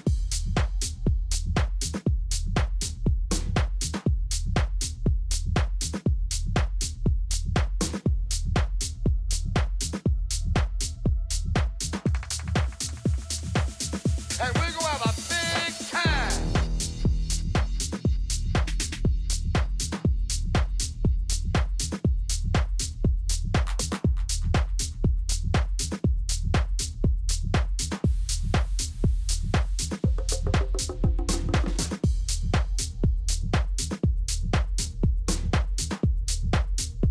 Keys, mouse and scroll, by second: 0.0-1.8 drag, 1.9-4.3 middle drag, 17.3-19.2 drag, 21.1-24.0 middle drag, 25.8-30.7 middle drag, 31.8-33.8 drag.